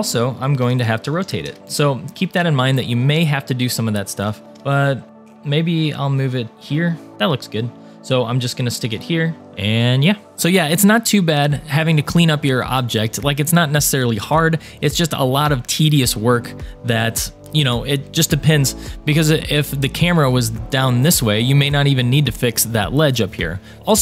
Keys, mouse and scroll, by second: 0.6 r, 2.3 scroll up 2, 2.8 shift+middle click, 3.3-3.6 scroll up 2, 3.8 shift+middle click, 4.5 g, 9.4 click, 9.8 scroll down 2, 10.3 middle click, 12.4 scroll up 1, 16.2-17.2 scroll up 1, 17.2 scroll down 3, 19.1-21.3 middle drag, 22.7 middle click, 23.6 scroll down 1.